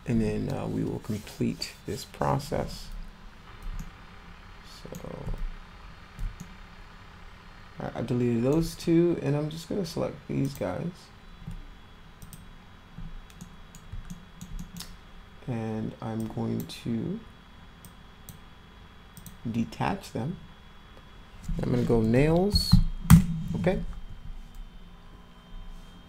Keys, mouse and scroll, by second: 3.8-4.9 alt+middle drag, 6.4-8.5 alt+middle drag, 10.4 click, 12.2 ctrl+click, 13.0-13.4 scroll up 4, 13.4 middle click, 14.1 alt+middle click, 14.6 middle click, 16.2 click, 17.8 click, 19.2 click, 20.8 space, 21.9-23.3 typing.